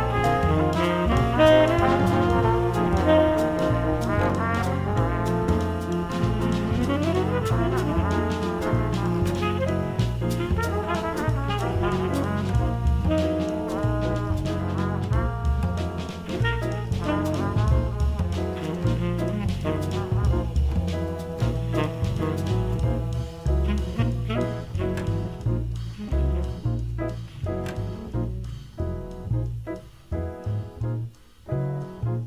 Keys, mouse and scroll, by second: 2.2-5.2 middle drag, 5.2-6.4 drag, 6.5 space, 9.3 space, 11.5 space, 13.0 x, 15.3 space, 18.1 x, 22.2-23.7 middle drag, 23.7-25.5 right drag, 25.5-27.0 middle drag, 27.0-29.9 right drag.